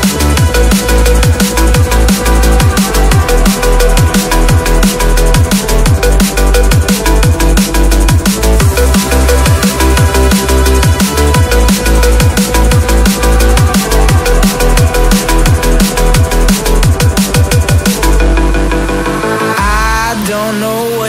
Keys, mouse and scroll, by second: 0.3 shift+click, 1.5-2.0 scroll up 1, 2.0 right click, 8.7 alt+scroll up 1, 9.8-10.7 typing, 12.3 typing, 15.8 typing, 16.5 alt+scroll down 1, 17.4 alt+scroll down 1, 18.0 ctrl+j, 19.3 alt+scroll down 1.